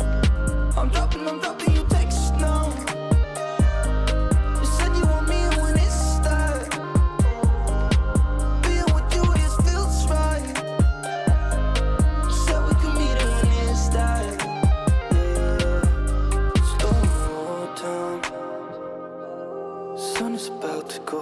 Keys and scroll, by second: 11.8 ctrl+space.